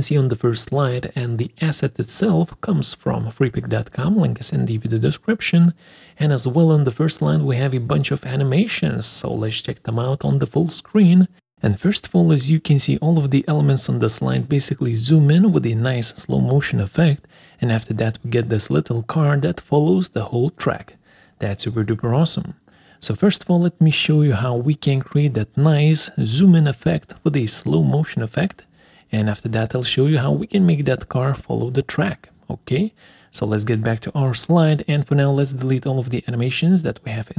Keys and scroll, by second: 31.7 ctrl+v, 31.7 Escape, 34.7 ctrl+a, 36.3 Delete.